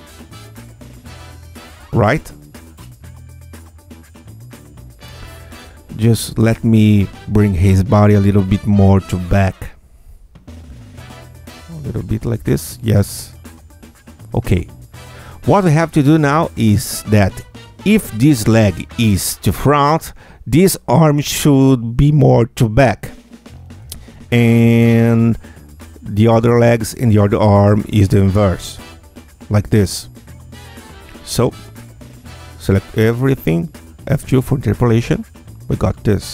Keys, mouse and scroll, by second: 8.2 Tab, 8.8 q, 9.6 click, 10.8 click, 11.6-13.4 drag, 14.4-16.8 drag, 18.0 Tab, 18.7 click, 20.7 alt+q, 20.7-23.7 alt+drag, 25.6 alt+click, 27.0 alt+click, 27.9-30.3 alt+drag, 31.6 ctrl+a, 33.8 F2, 34.3 Tab, 34.7-36.3 drag.